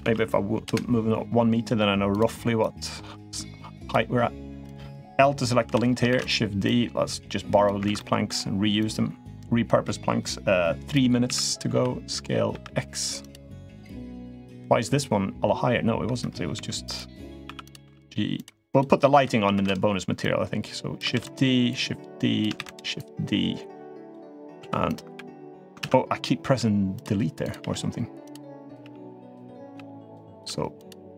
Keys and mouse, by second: 1.9 click, 2.3 click, 4.4 click, 5.4 l, 5.9 shift+d, 6.4-7.4 drag, 7.6 ctrl+z, 7.8 middle click, 8.5-10.7 drag, 11.0 s, 13.8-14.2 drag, 14.3-15.8 middle drag, 16.4 2, 16.6 click, 17.3 1, 17.4 click, 17.6 g, 18.5 click, 18.9 l, 19.3 shift+d, 20.0-20.7 drag, 21.5-22.2 drag, 22.8-23.9 drag, 24.4 2, 24.6 click, 24.9 h, 25.6 ctrl+z, 26.2 g, 27.2 click, 27.4 g, 28.4 click, 28.6-31.1 typing, 29.4 click, 30.1 click.